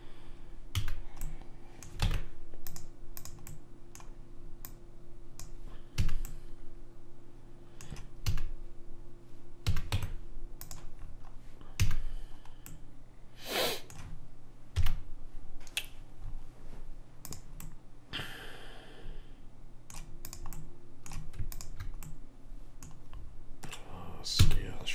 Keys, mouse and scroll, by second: 0.9 a, 2.2 ctrl+Tab, 3.3-6.6 drag, 3.6 right click, 6.1 a, 6.4-8.5 middle drag, 8.5 a, 9.8 a, 10.0 Tab, 12.0 a, 14.9 KP_1, 17.4-19.1 middle drag, 17.8 click, 19.3 middle click, 20.4-23.5 drag, 20.7-23.4 right drag, 23.2 middle click, 24.5 s.